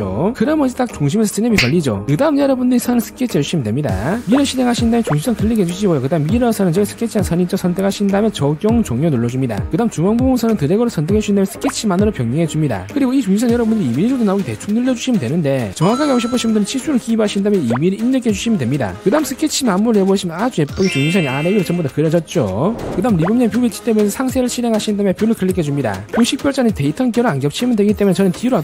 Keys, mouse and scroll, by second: 2.7 click, 3.9 click, 4.7 click, 6.2 click, 7.1 click, 8.3 click, 8.8 click, 9.3 click, 10.8 click, 12.7 click, 14.8 click, 15.4 click, 16.5 click, 17.3 click, 17.7 click, 18.5 2, 18.8 click, 20.5 click, 26.0 click.